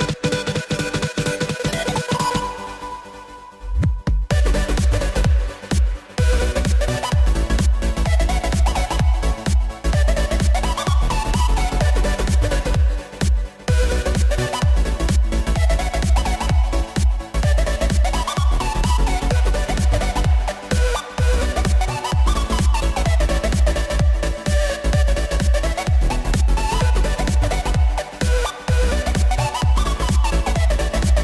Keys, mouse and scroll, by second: 0.3 KP_3, 0.8-1.5 scroll down 4, 1.5 Tab, 1.8 z, 2.3-2.9 drag, 2.9 b, 7.7 x, 8.6 Tab, 9.4 Tab, 9.7 a, 10.7 g, 12.9 Tab, 13.4 s, 15.3-15.9 scroll up 7, 15.9-16.6 shift+middle drag, 16.6 click, 17.7 Tab, 18.1 click, 19.0 click, 19.5 click, 20.2 b, 23.2 s, 26.8 ctrl+z, 27.3 ctrl+z, 28.4 s, 30.8 click.